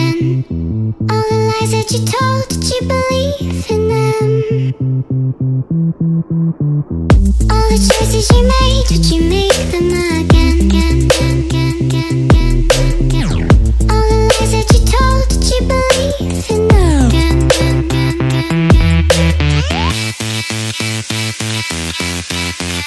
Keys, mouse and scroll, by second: 0.5 ctrl+click, 0.7 ctrl+BackSpace, 1.8 ctrl+d, 2.7 click, 4.8 alt+click, 5.3 ctrl+click, 5.5 ctrl+click, 6.3 click, 6.8 click, 8.5 click, 8.7 click, 10.6 click, 11.6 click, 12.3 click, 13.6 ctrl+click, 14.3 click, 16.9 click, 22.3 click.